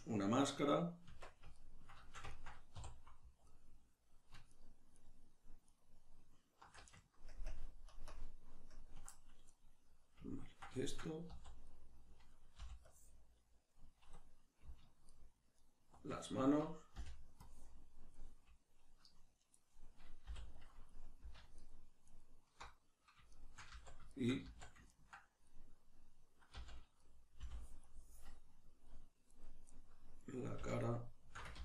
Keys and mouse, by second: 1.1 Tab, 2.7 3, 3.5 alt+right click, 4.5 alt+shift+right click, 4.9 alt+shift+right click, 5.7 alt+shift+right click, 7.3 ctrl+KP_Add, 9.6-15.1 middle drag, 11.3 z, 12.6 b, 15.1 alt+shift+right click, 15.6 alt+shift+right click, 17.0 b, 21.6 alt+shift+right click, 22.1 alt+shift+right click, 23.7-30.8 middle drag, 23.7 z, 24.4 z, 26.6 z, 27.4 b, 30.8 alt+shift+right click, 31.5 ctrl+z.